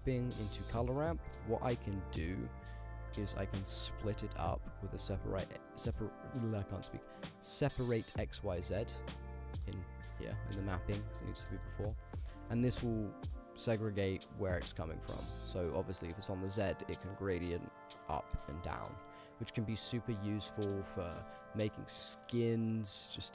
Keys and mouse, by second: 0.2 middle click, 1.0 middle drag, 1.5 middle click, 2.8 click, 3.3 shift+a, 5.9 middle click, 7.0-8.0 drag, 8.4 click, 9.0 middle click, 9.6 middle click, 9.9 click, 11.6 middle click, 12.3-13.2 drag, 14.1-14.7 drag, 15.1 middle click, 16.0-19.2 drag, 20.1 shift+click, 22.3-23.1 drag.